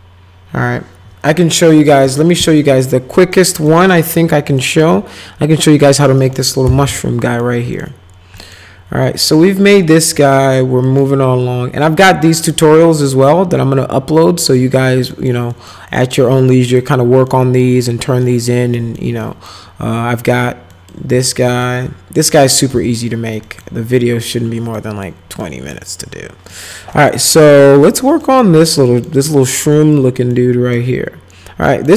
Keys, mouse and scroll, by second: 1.9 middle click, 2.6 middle click, 3.3 middle click, 3.9 middle click, 4.6 middle click, 5.9 middle click, 6.2 middle click, 6.4-7.4 typing, 7.2 middle click, 7.7 middle click, 8.4 middle click, 9.3 middle click, 10.1 middle click, 10.9 middle click, 12.4 click, 14.6 middle click, 15.1 middle click, 15.5 middle click, 16.0 middle click, 16.7 click, 17.3 middle click, 18.2 middle click, 18.7 middle click, 19.2 middle click, 20.7 middle click, 21.4 middle click, 22.7 z, 23.4 middle click, 24.7 middle click, 25.4 middle click, 26.5 middle click, 26.9 middle click, 27.3 middle click, 27.7 middle click, 28.2 middle click, 28.8 middle click, 29.7 middle click, 30.3 middle click, 31.7 middle click.